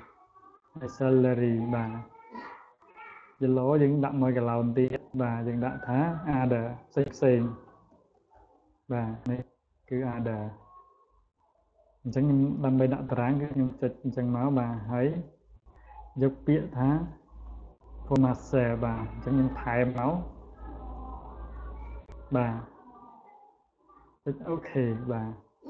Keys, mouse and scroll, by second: 0.3 click, 3.0-4.4 drag, 5.4 click, 7.3-8.7 typing, 9.8 click, 11.0-13.0 drag, 13.6 right click, 17.1 click, 18.8 click, 19.5 click, 20.2 click, 20.8 click, 21.3 click, 22.4-22.9 drag, 24.0 click, 24.9 click.